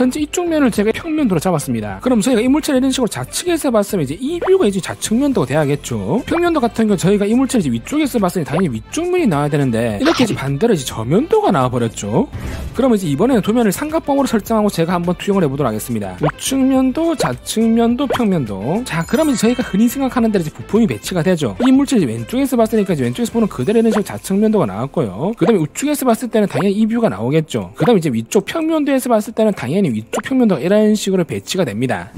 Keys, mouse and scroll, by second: 3.2 click, 3.7 click, 4.6 click, 6.3 ctrl+z, 7.0 click, 8.1 click, 8.5 click, 10.1 click, 16.6 click, 17.5 click, 18.4 click, 22.5 click, 23.1 click, 24.6 click, 25.9 click, 26.4 click, 27.3 click, 28.7 click, 29.8 click, 30.9 click.